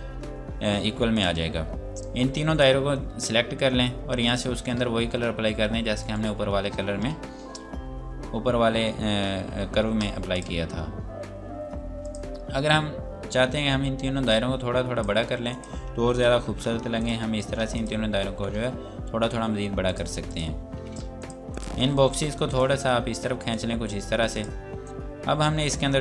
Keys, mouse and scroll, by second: 1.0 click, 6.0 right click, 10.4 click, 14.3 shift+click, 15.5 click, 16.4 ctrl+r, 16.9 click, 17.7 click, 18.2 r, 18.8-19.4 scroll down 1, 19.9 click, 21.2 shift+click, 22.6 click.